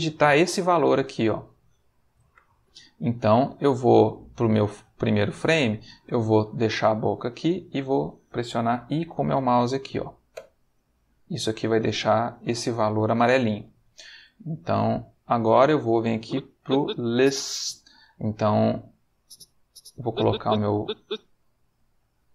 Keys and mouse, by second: 0.1-2.9 drag, 2.3 Escape, 3.5-5.5 drag, 10.3 i, 14.5-15.6 middle drag, 16.1-17.5 drag, 19.1-21.1 drag.